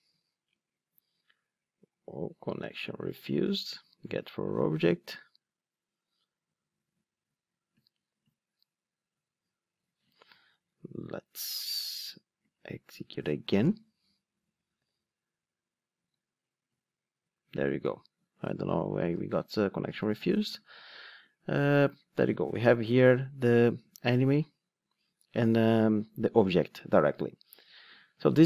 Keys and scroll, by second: 14.8 ctrl+r.